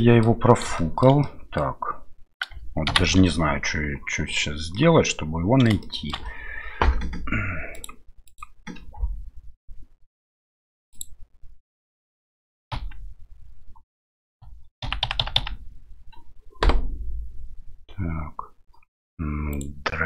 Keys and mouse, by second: 0.8 shift+middle click, 1.2 middle click, 2.9 shift+Left, 4.7 middle click, 5.8 shift+middle click, 7.7 click, 8.3 click, 10.9 click, 12.7 KP_Decimal, 19.5 right click.